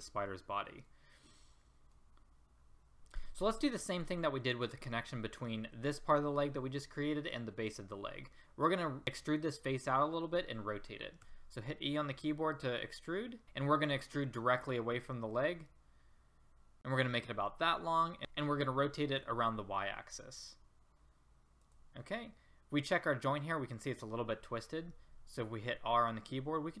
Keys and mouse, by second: 0.9-2.6 middle drag, 11.2 e, 18.2 r, 19.1 r, 22.2 middle click, 25.6 r.